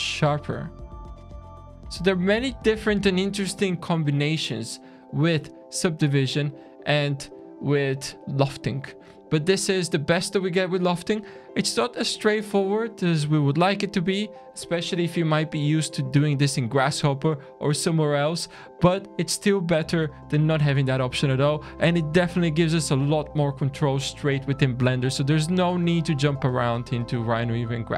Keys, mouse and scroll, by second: 5.9-6.3 scroll up 4, 6.5-7.9 scroll down 5, 27.1 click.